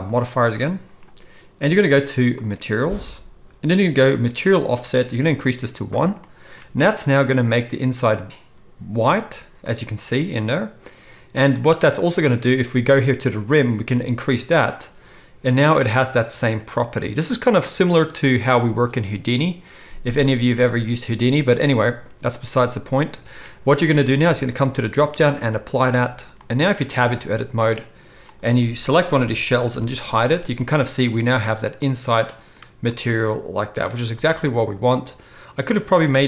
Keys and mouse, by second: 0.3-2.3 middle drag, 2.3-28.3 drag, 26.8 Tab, 28.3-36.2 middle drag, 29.1 ctrl+l, 29.7 h.